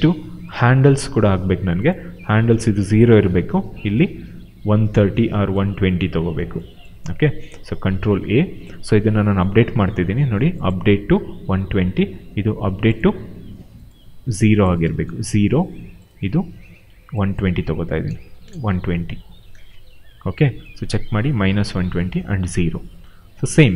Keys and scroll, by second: 1.0 e, 7.6 ctrl+a, 14.7 0, 14.8 Return, 17.2-18.7 typing.